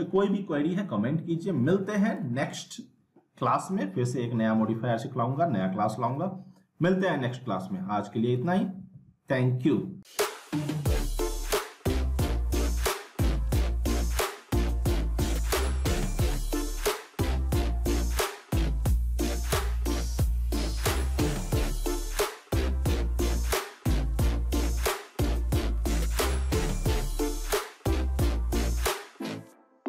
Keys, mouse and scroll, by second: 3.0 click.